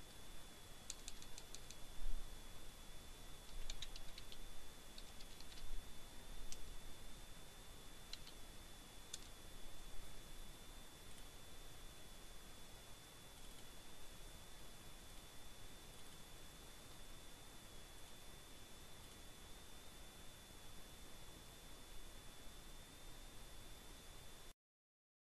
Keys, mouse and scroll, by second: 0.4-2.1 typing, 3.8 a, 4.9 Return, 7.1 click, 8.8 click, 11.4 click, 12.4 click, 15.1 click, 16.3 click.